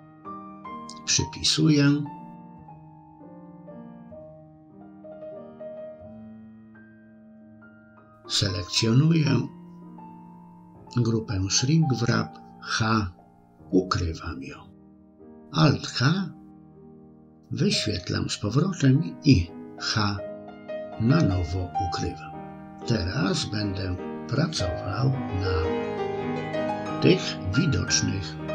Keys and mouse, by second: 0.7 click, 6.6 click, 8.0 click, 8.6 middle click, 12.3 h, 16.8 alt+h, 20.6 h, 22.2 middle click, 23.3-25.4 middle drag, 25.8 middle click, 26.5 shift+middle click, 28.0 a.